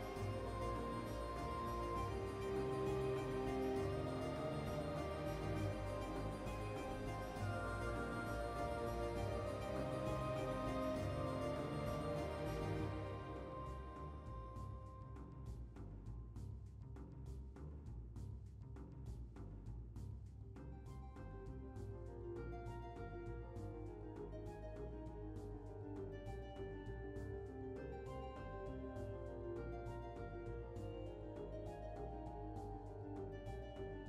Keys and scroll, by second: 1.5 typing, 6.8 typing, 13.3 typing, 17.0 typing, 21.3 typing, 25.3 typing, 27.6 typing, 31.2 typing.